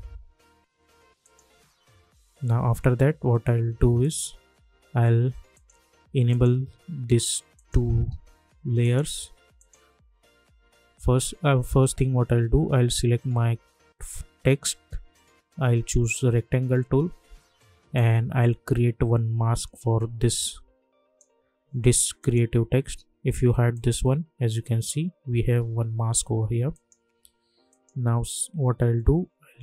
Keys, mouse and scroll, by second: 4.0 click, 7.5 click, 18.2-21.3 drag, 26.7 click.